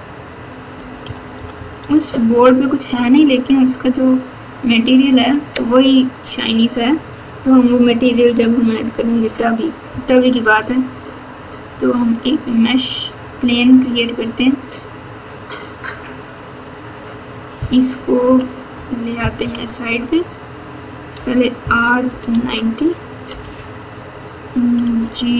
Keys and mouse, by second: 1.0 KP_8, 1.3 KP_Subtract, 1.5 KP_Subtract, 2.4 KP_Subtract, 9.0 shift+a, 18.2 KP_3, 19.4 KP_1, 21.1 r, 24.8 g.